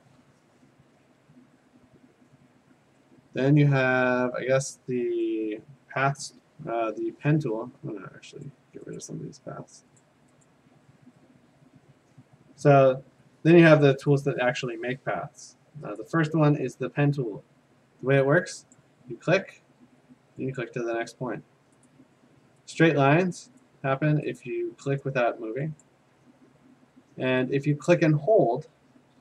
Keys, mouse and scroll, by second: 6.6-7.8 scroll, 8.5 click, 9.0 click, 10.0 click, 10.9 click, 14.1 click, 16.0 click, 18.8 click, 20.6 click, 21.9 click, 22.8 click, 23.6 click, 24.4 click, 25.0 click, 25.8 click.